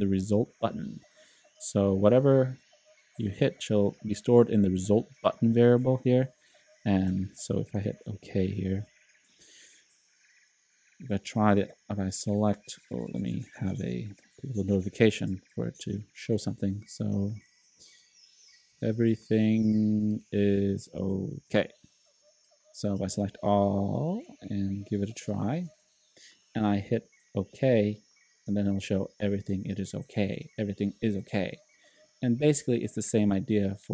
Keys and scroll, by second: 8.5 shift+k, 18.4-21.5 typing, 23.1 super+a, 24.0-24.8 typing, 25.6 shift+super+t.